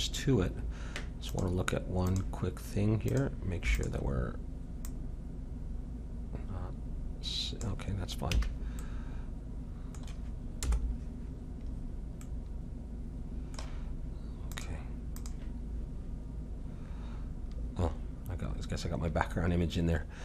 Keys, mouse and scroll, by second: 1.3-6.8 drag, 6.8-8.8 middle drag, 8.4 a, 10.6 KP_0, 10.8 middle click, 14.6-16.5 drag, 20.1-20.2 middle drag.